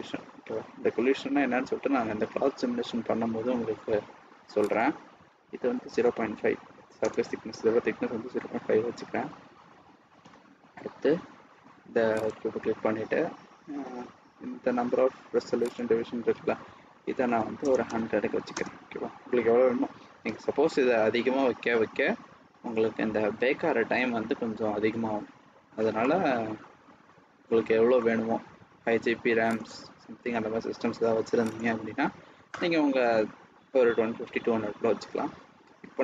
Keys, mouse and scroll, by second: 4.6 click, 12.1 click, 13.9-15.1 scroll down 2, 15.5 click, 17.8 KP_0, 24.0 scroll down 2, 25.9 middle click, 27.9 scroll down 1, 28.0-28.9 scroll up 1, 29.5 click, 31.4 click.